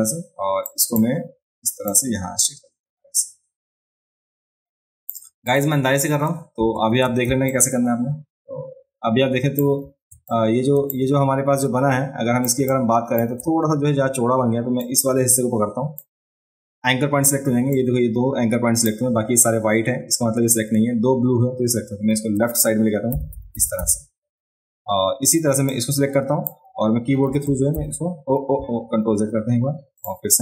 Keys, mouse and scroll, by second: 0.7 click, 1.9-5.1 drag, 5.5 click, 7.0 ctrl+space, 7.5-9.6 ctrl+alt+drag, 10.3 ctrl+click, 11.9 click, 12.7 click, 14.8-16.0 drag, 17.7-18.8 drag, 25.7 click, 29.1 ctrl+z, 30.0 click.